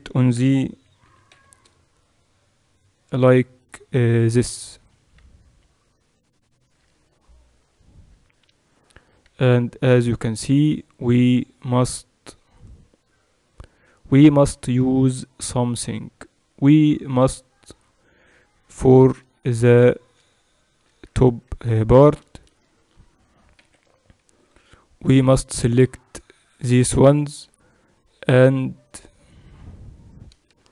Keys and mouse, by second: 0.1 r, 16.5-18.8 right drag, 18.8 Tab, 19.5 click, 20.5-25.7 middle drag, 22.3 a, 22.5 a, 23.7 c.